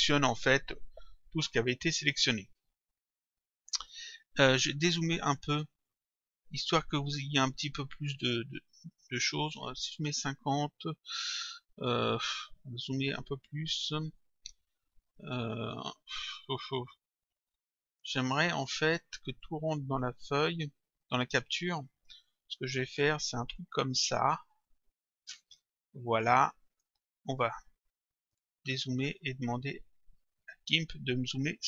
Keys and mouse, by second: 5.9 click, 9.5 click, 13.6 click, 16.4 click, 19.4 click, 23.0 click, 24.7 click, 26.7 click, 28.2 click, 30.2 click.